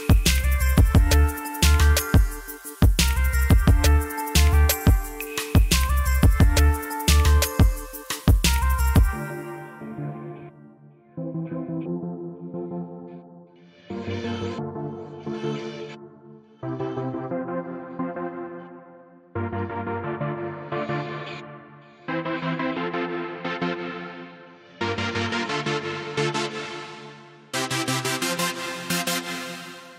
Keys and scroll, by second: 26.9 Delete.